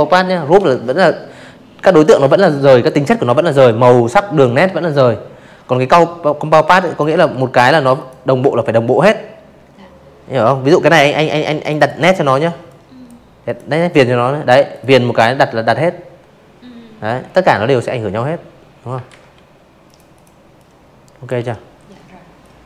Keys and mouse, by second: 3.5 space, 3.7 click, 4.0 v, 4.5 click, 4.9 click, 8.5 click, 8.7 click, 9.6 click, 10.4 click, 11.6 click, 16.0 ctrl+z, 16.7 click, 17.0 click, 17.4-18.1 drag, 18.2 Delete, 19.3 click, 20.2 Delete.